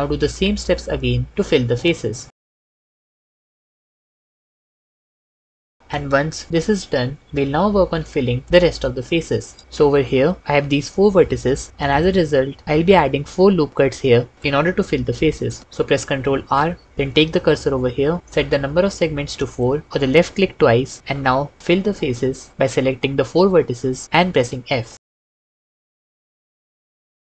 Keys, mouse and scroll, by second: 2.1 f, 2.9 shift+f, 3.8 shift+f, 4.8 shift+f, 16.1 ctrl+r, 18.2 s, 18.7 4, 24.2 f, 25.3 f, 25.9 f, 26.4 f, 27.2 f.